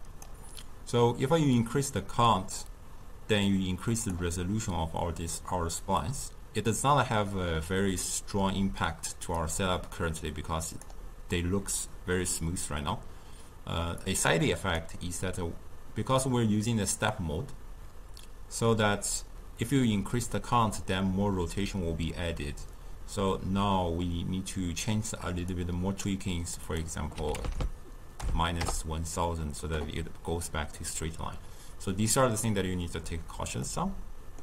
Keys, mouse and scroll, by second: 1.4-4.4 drag, 9.4-12.4 drag, 14.0-17.2 drag, 25.5-27.5 drag, 27.5 0, 33.7-34.4 middle drag.